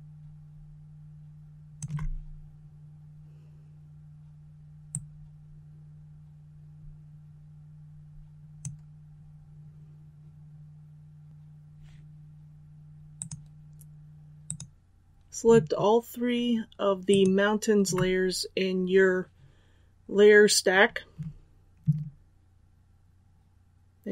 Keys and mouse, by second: 17.0 shift+click.